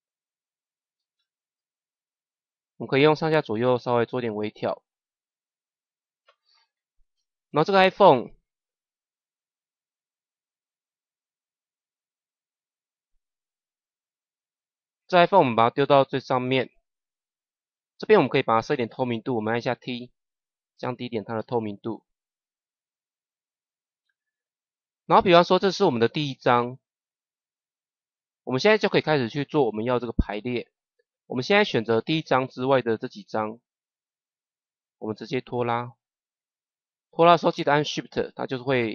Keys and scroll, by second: 1.0 Up, 2.6 Right, 3.1 Up, 4.1 Right, 5.3 Down, 5.7 Up, 19.4 t.